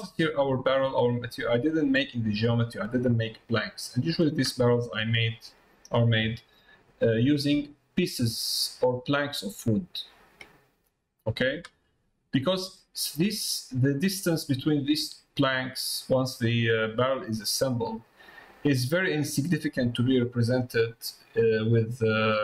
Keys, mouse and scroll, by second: 4.0 middle click, 4.8 middle click, 5.2 shift+middle click, 8.5 middle click, 10.2 middle click, 11.8 middle click, 13.1 middle click, 13.8 middle click, 16.4 middle click, 19.6 middle click.